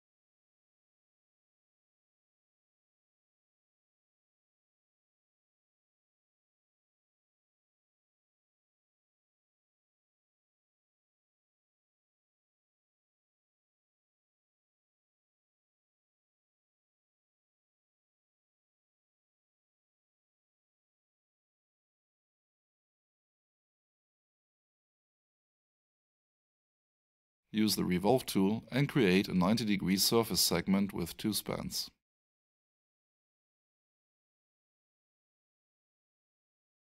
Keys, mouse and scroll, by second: 19.6 F8, 23.6 click, 26.4 double click, 28.5 click, 31.1 9, 32.0 Tab, 32.4-33.2 typing, 33.4 Tab, 35.2 2, 36.5 Return.